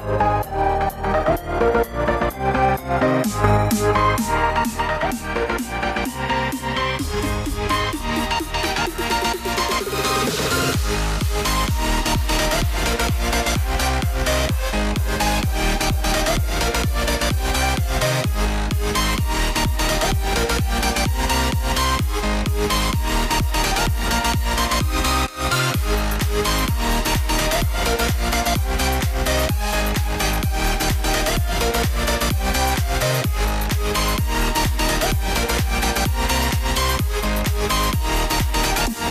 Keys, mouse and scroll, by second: 2.4-8.6 drag, 11.1-12.9 shift+drag, 13.6-18.7 drag, 26.5 Up, 26.7 typing, 27.5-34.6 drag, 34.8 Down, 34.9-35.2 typing, 35.9-39.1 drag.